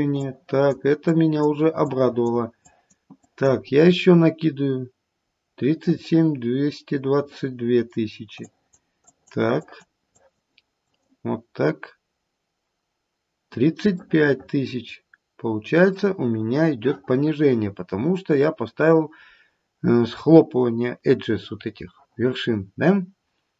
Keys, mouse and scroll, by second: 0.1 click, 1.1 click, 1.8 click, 2.6 click, 3.1 click, 5.3-5.8 scroll down 1, 5.8 middle click, 8.8 click, 9.0 click, 9.5 click, 10.1 click, 10.8 click, 14.2 middle click.